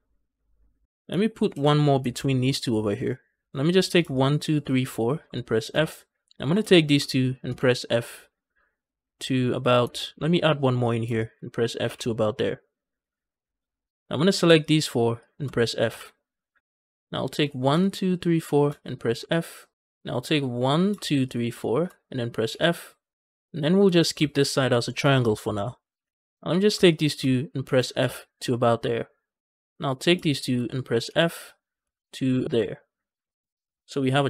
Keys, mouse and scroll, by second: 1.4 ctrl+r, 2.0 ctrl+r, 3.5 click, 4.0 shift+click, 4.5 shift+click, 4.8 shift+click, 5.6 f, 6.2 click, 6.6 shift+click, 7.3 f, 10.0 ctrl+r, 10.7 click, 11.0 shift+click, 11.7 f, 13.8 ctrl+z, 14.1 click, 14.5 shift+click, 14.8 shift+click, 15.7 f, 17.3 click, 17.6 shift+click, 17.9 shift+click, 18.2 shift+click, 19.1 f, 20.5 click, 20.8 shift+click, 21.1 shift+click, 21.4 shift+click, 22.4 f, 23.8 click, 24.2 shift+click, 24.5 shift+click, 25.2 shift+click, 25.9 f, 26.4 click, 26.7 shift+click, 27.5 f, 27.9 f, 29.8 click, 30.1 shift+click, 31.7 f, 32.4 f.